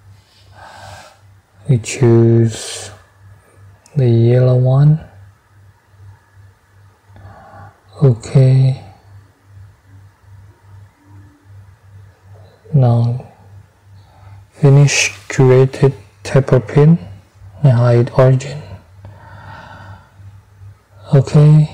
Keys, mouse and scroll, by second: 6.5 click, 8.8 click, 10.9 click, 11.5 click, 14.0 middle click, 14.9 click, 16.4 click, 17.6 space, 19.5 double click.